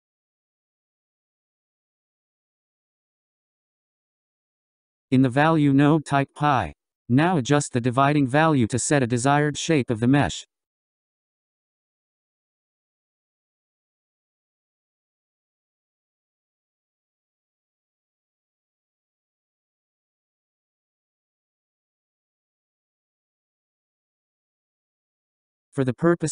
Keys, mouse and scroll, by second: 0.7-2.5 drag, 4.1 click, 6.0-9.0 drag, 10.0-24.2 drag, 24.2-26.3 scroll down 9.